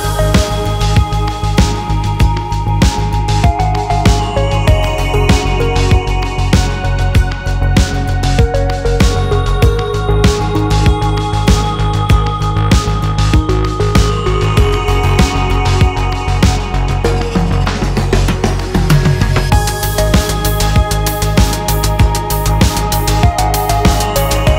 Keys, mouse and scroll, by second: 0.1 shift+middle click, 0.5 scroll down 1, 0.6-1.7 middle drag, 1.7 KP_3, 1.8 scroll down 2, 1.8 shift+middle click, 2.0-2.8 scroll up 5, 2.1 2, 2.2 shift+middle click, 2.5 shift+middle click, 3.0 alt+click, 3.1-5.2 typing, 3.5 alt+click, 4.3 alt+click, 4.8 shift+click, 5.4 shift+middle click, 6.0 alt+shift+click, 6.4 shift+middle click, 6.6 middle click, 6.9 shift+click, 7.1 ctrl+e, 7.4 scroll down 1, 7.5 shift+middle click, 7.6 scroll up 1, 7.8 shift+click, 8.1 middle click, 8.2 Tab, 8.3-11.2 typing, 8.4 scroll down 4, 8.5 shift+middle click, 8.6 scroll up 9, 8.8 shift+middle click, 9.1 click, 10.2 click, 10.7 alt+click, 11.0 alt+m, 11.3 click, 11.4 shift+click, 11.6 alt+m, 12.0 click, 12.3-14.4 typing, 12.5 shift+middle click, 12.6 click, 13.7 shift+click, 13.9 alt+m, 14.5 click, 14.6 shift+click, 14.8 alt+m, 15.2 alt+m, 15.4 shift+middle click, 15.6 scroll down 2, 15.8 click, 15.9 alt+m, 16.2 alt+m, 16.4 shift+middle click, 16.4 Tab, 16.5 middle click, 16.9 Tab, 17.1 middle click, 17.4 scroll down 3, 17.4 middle click, 17.6 KP_3, 17.7 scroll up 2, 18.1 click, 18.2 scroll up 1, 18.4 v, 18.6 click, 18.7 v, 19.0 shift+click, 19.1 alt+m, 19.3 click, 19.5 alt+m, 19.8 shift+click, 19.9 alt+m, 20.0 shift+click, 20.1 alt+m, 20.4 scroll up 2, 20.4-22.4 typing, 20.6 alt+click, 20.8 ctrl+z, 21.0 shift+click, 21.5 shift+click, 21.7 alt+m, 22.5 shift+click, 23.1 alt+m, 23.2 click, 23.7 g, 23.8 g, 24.2 scroll down 2, 24.2 click, 24.5 g.